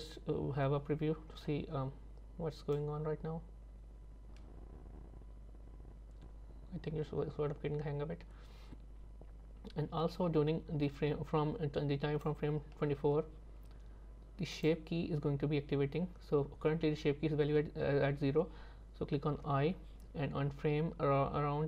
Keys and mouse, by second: 2.8-12.3 drag, 19.5 i.